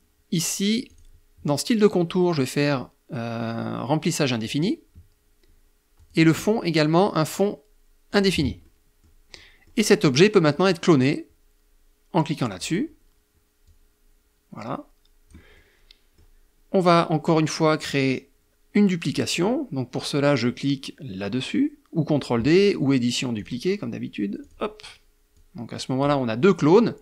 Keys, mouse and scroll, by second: 3.5 click, 5.0 click, 7.1 click, 7.6 middle click, 8.4 middle click, 11.6 click, 12.7-14.5 drag, 14.6 middle click, 15.4-22.4 scroll up 1, 22.4 click, 23.4 click, 24.3 click, 26.2-27.0 drag.